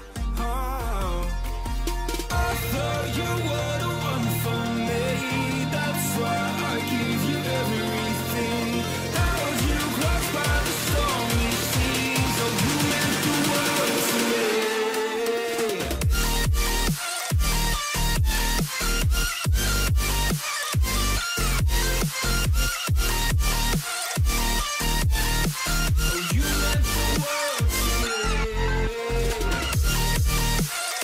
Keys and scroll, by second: 0.6 ctrl+j, 4.3 ctrl+j.